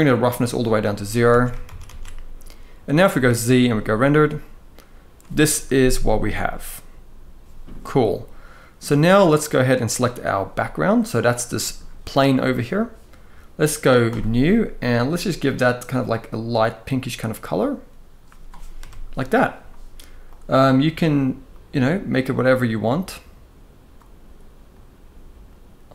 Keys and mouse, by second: 1.0 alt+a, 1.4 ctrl+s, 1.5 ctrl+s, 2.7 z, 9.7 click, 11.2 middle click, 14.8 click, 18.4 KP_0, 19.9 drag.